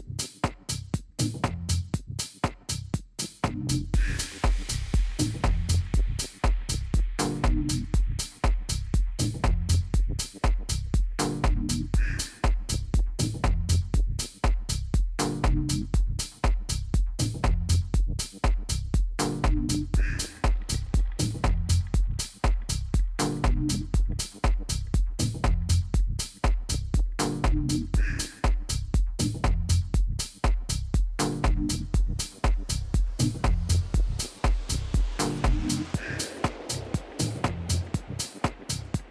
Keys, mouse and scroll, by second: 0.7 KP_3, 1.4 KP_1, 2.6 KP_3, 3.6 KP_1, 11.9 ctrl+KP_1, 14.6 KP_3, 15.5 KP_1, 16.8 KP_3, 18.1 ctrl+KP_1, 21.0-24.7 middle drag, 29.0 n, 30.1-32.8 middle drag, 36.2-38.1 drag, 36.9-39.1 middle drag.